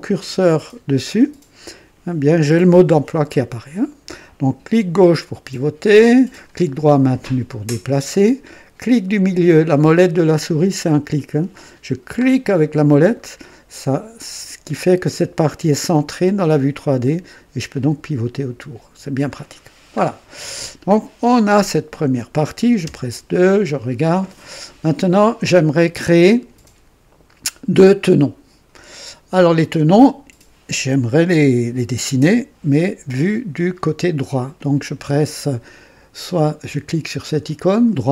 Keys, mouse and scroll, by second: 5.0-6.5 drag, 6.6-8.2 right drag, 12.5 middle click, 16.4-19.4 drag, 19.6 scroll down 2, 20.6 scroll down 1, 22.8 KP_2, 23.3-24.2 right drag.